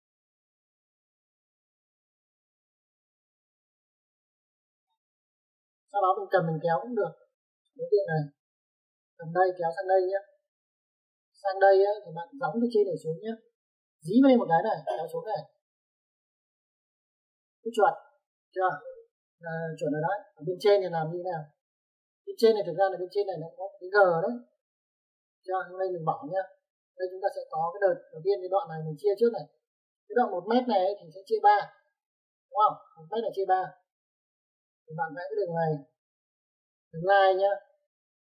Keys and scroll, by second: 0.0-0.4 typing, 5.6 space, 18.7 Escape, 36.6 l, 36.7 space.